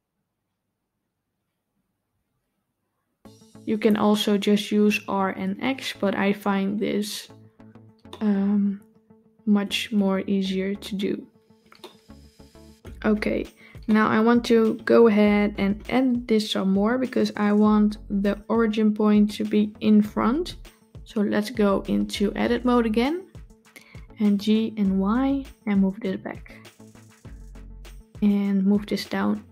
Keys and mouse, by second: 8.0-9.5 shift+middle drag, 11.7-12.7 shift+middle drag, 13.8-14.3 shift+middle drag, 22.5 Tab, 24.1 g, 28.9 g.